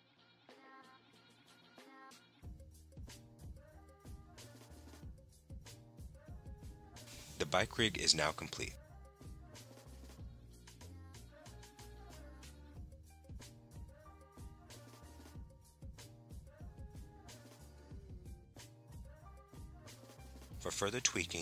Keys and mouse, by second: 2.1 click, 3.7 Tab, 6.9 click, 7.9-16.7 drag, 16.7 middle click, 16.8 click, 21.3 click.